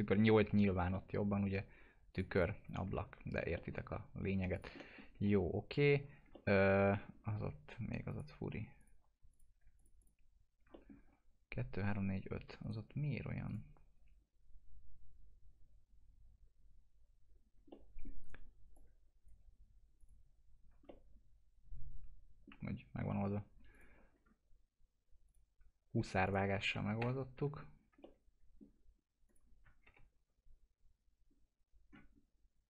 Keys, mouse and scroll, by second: 0.5 F4, 0.9 alt+middle click, 2.1 click, 2.5 F4, 2.9 alt+middle click, 4.5 click, 4.8 alt+middle click, 5.3 scroll up 1, 6.0 scroll down 1, 6.4 alt+middle click, 7.1 alt+scroll up 1, 7.4 alt+F4, 8.1 alt+click, 10.7 alt+middle click, 11.0-11.9 scroll up 1, 11.9 1, 12.6 right click, 13.4 click, 17.3-17.7 scroll up 1, 17.7 middle click, 18.2 right click, 18.7 click, 20.8 alt+middle click, 22.8 scroll down 1, 23.7 click, 24.1-25.2 scroll down 1, 25.2 click, 25.9 2, 26.2 click, 27.0 ctrl+BackSpace, 27.7 scroll down 1, 28.0 alt+middle click, 29.2 click, 29.8 ctrl+BackSpace, 31.2 scroll up 1.